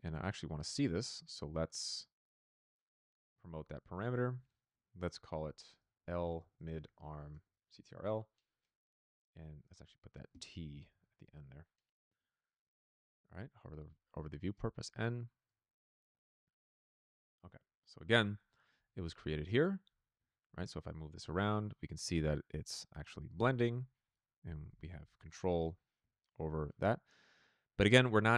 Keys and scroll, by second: 5.6-8.3 typing, 10.5-11.4 typing.